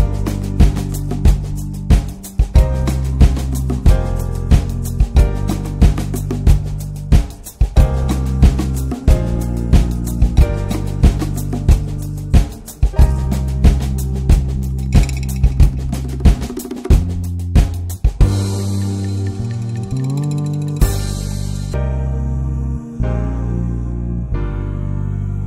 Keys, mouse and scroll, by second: 0.9-1.4 drag, 2.1-5.5 drag, 5.6 scroll down 1, 5.8 click, 6.0 scroll up 1, 6.2-6.5 scroll down 3, 6.5-6.8 middle drag, 6.8 s, 7.4 Tab, 7.5 scroll up 1, 7.7 middle click, 8.5 click, 9.0 shift+click, 9.7 shift+click, 10.8 s, 11.7 click, 13.2 click, 13.6 alt+middle click, 14.2-14.5 scroll down 5, 14.5 alt+middle click, 15.0-15.3 scroll up 4, 15.5 click, 16.0 alt+middle click, 16.3 scroll down 4, 16.6 middle click, 16.8 Tab, 16.9 drag, 17.2 middle drag, 17.4 click, 17.6 scroll up 2, 17.8 s, 18.8 s, 19.6 s, 20.4 click, 20.5 scroll down 3, 20.7 click, 20.9 ctrl+a, 21.4 alt+middle click, 22.0-22.7 shift+middle drag, 22.7-23.9 right drag, 23.9 drag, 24.1 click, 24.3 s, 25.2 click.